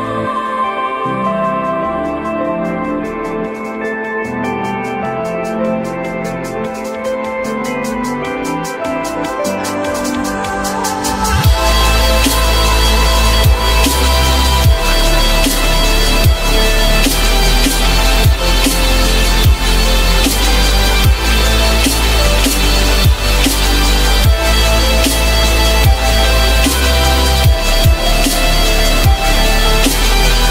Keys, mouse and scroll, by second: 1.4 alt+middle click, 2.0 alt+middle click, 2.5 alt+middle click, 2.6 alt+double middle click, 3.5 F4, 3.9 F4, 5.3 F3, 6.1 alt+middle click, 6.6 alt+middle click, 9.2 F3, 9.8 alt+middle click, 10.4 alt+middle click, 11.2 j, 15.0 alt+middle click, 18.7 alt+middle click, 19.3 alt+middle click, 28.5 ctrl+click, 29.1 ctrl+click, 29.2 ctrl+double click, 29.7 ctrl+click.